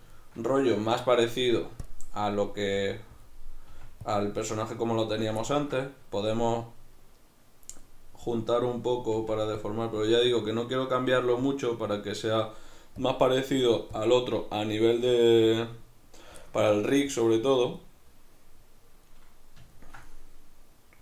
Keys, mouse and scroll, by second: 1.9 click, 2.7 f, 3.3 click, 3.7 f, 4.2 click, 5.5-8.6 ctrl+middle drag, 8.6-9.7 drag, 9.2 f, 12.5 middle click, 13.0-16.4 drag, 16.4 shift+middle click, 17.1-19.0 drag, 19.0-21.0 middle drag.